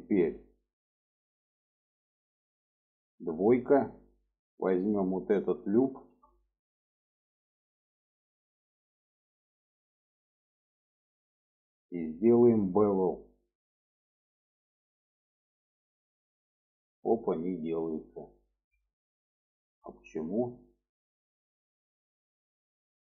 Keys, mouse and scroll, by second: 0.5 middle click, 2.9 2, 3.9 click, 5.7 click, 6.2-8.5 middle drag, 8.7-9.6 middle drag, 10.4 middle click, 13.1 click, 14.3-16.8 drag, 18.2 ctrl+z, 18.9 click, 19.3 middle click, 20.1-21.2 middle drag, 21.4 shift+middle click, 22.4 alt+middle click.